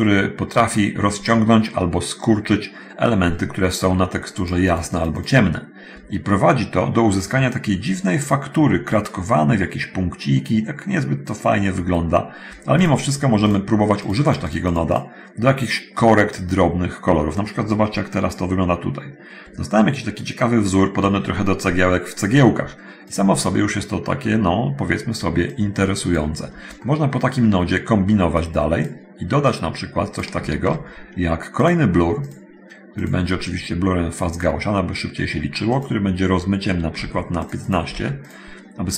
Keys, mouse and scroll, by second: 4.6 scroll up 1, 5.2 scroll up 1, 13.7 click, 14.3 click, 23.3 click, 25.7-26.3 drag, 26.6-27.8 middle drag, 28.6 click, 29.5-30.6 drag, 31.8 click, 33.2 click, 34.5 click, 35.7 click, 37.0 1, 37.0 5, 37.7 click, 38.1 1.